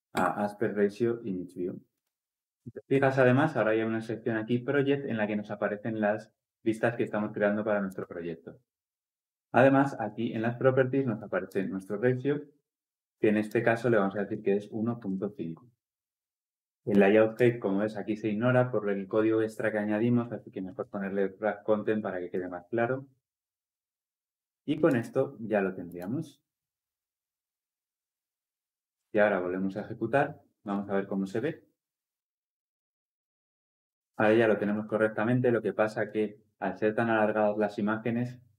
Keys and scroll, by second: 30.5 shift+F10.